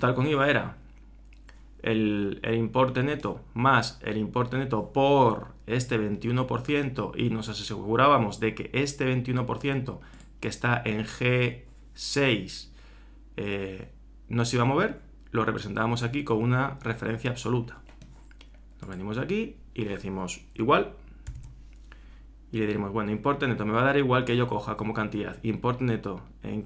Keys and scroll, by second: 21.3 shift+0.